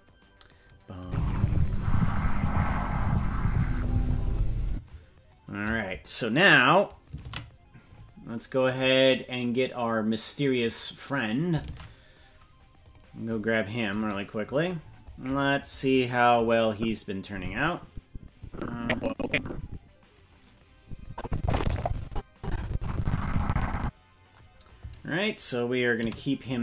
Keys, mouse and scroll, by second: 9.5 ctrl+s, 9.5 space, 11.6 ctrl+Tab, 12.7 click, 14.8-15.8 scroll down 1, 15.8-16.7 scroll down 21, 16.7-24.3 drag, 25.9 i.